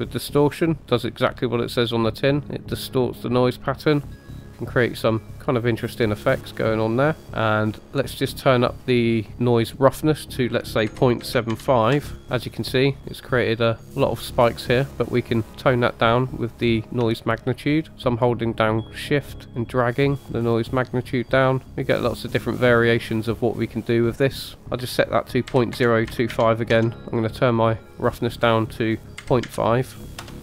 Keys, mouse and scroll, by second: 0.0-7.2 drag, 9.6-12.2 drag, 13.0 middle drag, 13.7-15.6 middle drag, 17.0-21.6 shift+drag, 21.6 scroll up 2, 22.2 middle click, 24.6-26.9 drag, 28.2-30.4 drag.